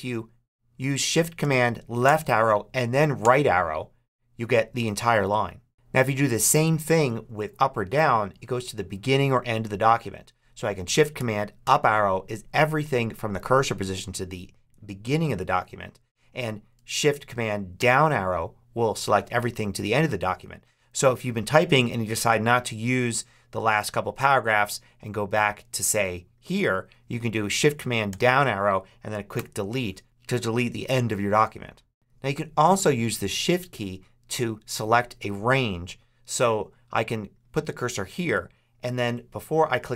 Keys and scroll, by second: 1.9 shift+super+Left, 3.1 shift+super+Right, 11.5 shift+super+Up, 17.6 shift+super+Down, 28.0 shift+super+Down, 29.2 shift+super+BackSpace.